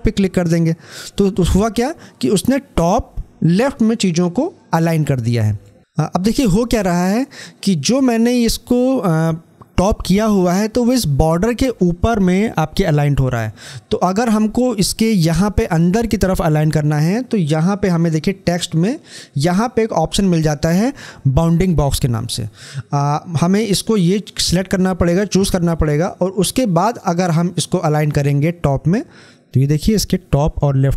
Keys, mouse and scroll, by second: 5.8 shift+click, 17.7 shift+click, 26.6 click.